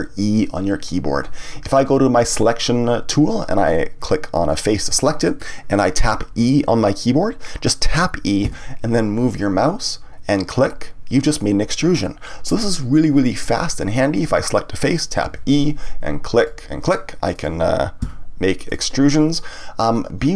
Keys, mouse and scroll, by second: 2.5 click, 4.0 click, 4.9-8.0 middle drag, 10.6 click, 14.1 click, 15.2 e, 16.4 click, 17.3 click, 18.0 e, 18.7 click.